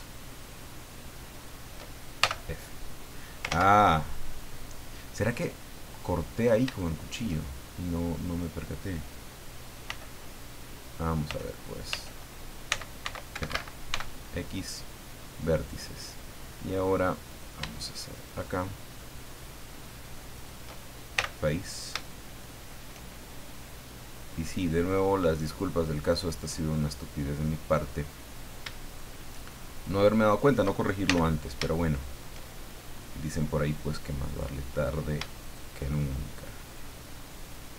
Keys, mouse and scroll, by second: 0.5 shift+right click, 1.3 shift+right click, 2.2 shift+f, 3.5 ctrl+z, 4.5 middle click, 5.7-6.3 scroll up 2, 6.8 shift+middle click, 8.2 right click, 9.1-9.4 scroll down 2, 9.9 f, 11.3-13.9 typing, 13.3 Escape, 14.6 click, 15.1-15.4 scroll down 1, 16.4-16.7 scroll up 1, 17.3 right click, 18.1 shift+right click, 19.2 shift+right click, 20.3 shift+right click, 21.2 f, 21.5 middle click, 23.8-26.7 middle drag, 28.3 shift+right click, 28.9 shift+right click, 29.7 shift+right click, 30.2 shift+right click, 31.0 shift+f, 31.7 shift+middle click, 34.3 right click, 35.4 shift+right click, 35.8 shift+middle click, 37.5 shift+right click.